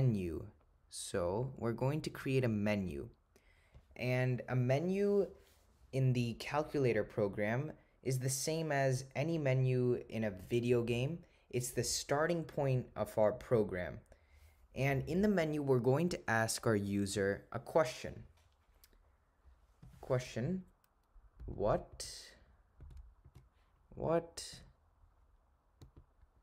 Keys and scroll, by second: 21.5 -, 22.0 ^, 23.3 4, 24.6 0, 26.3 7.